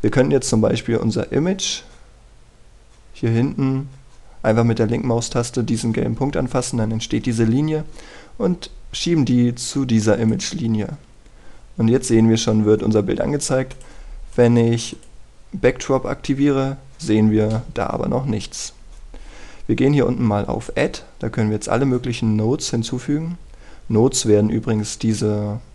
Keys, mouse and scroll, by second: 1.5-15.9 drag, 18.6 scroll down 1, 18.8-19.3 scroll up 1, 19.3-20.1 scroll down 1, 20.1-20.6 scroll up 1, 21.7 click.